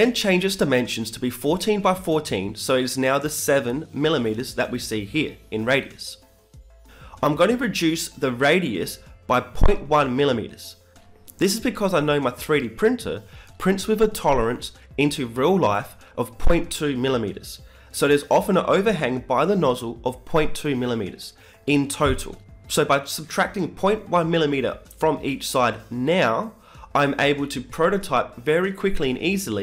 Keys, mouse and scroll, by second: 0.2 t, 0.9 KP_7, 3.7-5.3 drag, 6.0-7.8 drag, 9.1-11.0 drag, 19.8 ctrl+c, 20.5 ctrl+v.